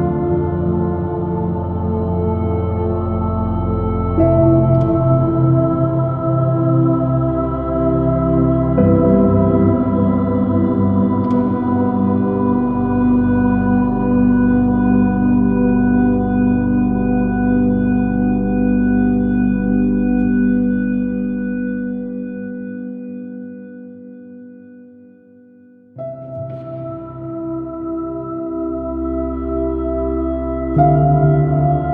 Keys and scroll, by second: 4.5 super+-, 5.4 super+|, 5.7 super+-, 6.6 super+|, 7.0 space, 13.2 b, 16.2 r, 16.6 b, 17.2 space, 19.0-19.8 typing, 20.3 ctrl+alt+b, 23.1 space, 24.2 space, 26.6 m, 29.9 super+t.